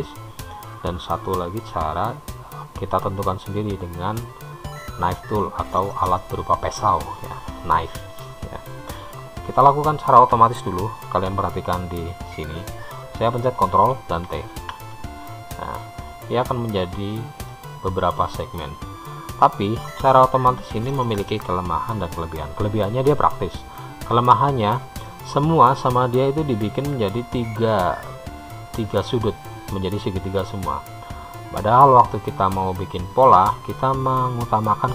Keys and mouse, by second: 14.7 ctrl+t, 18.1-19.1 middle drag.